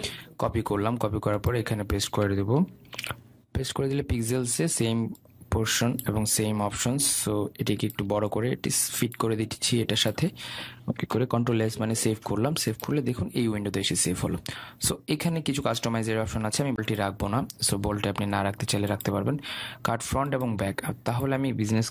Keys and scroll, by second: 0.2 ctrl+c, 3.4 ctrl+v, 12.0 ctrl+s.